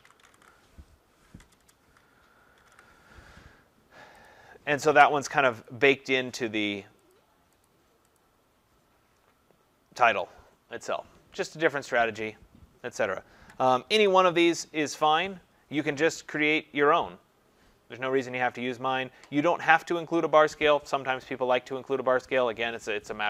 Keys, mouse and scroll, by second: 0.0-3.1 typing, 4.3 click, 4.3 typing, 5.7 click, 7.1 click, 7.6 click, 8.2 click, 13.9 ctrl+-, 14.3 ctrl+-, 14.8 ctrl+-, 18.6-19.9 scroll, 19.9 scroll.